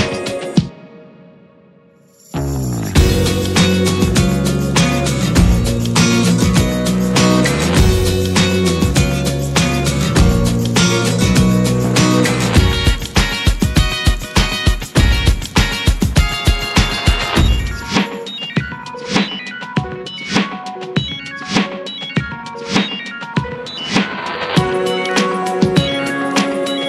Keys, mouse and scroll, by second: 1.0 click, 2.9 click, 4.5-6.5 middle drag, 6.5 click, 7.2-10.4 middle drag, 10.4 click, 11.0 alt+middle click, 11.8 alt+middle click, 12.3-13.4 shift+middle drag, 13.4 r, 16.1-16.8 shift+middle drag, 16.8-18.1 drag, 19.6 click, 20.3-21.2 middle drag, 21.2 scroll up 2, 21.5-22.7 middle drag, 22.7 click, 23.4-24.0 middle drag, 24.0-25.0 scroll up 1, 25.0-26.8 drag.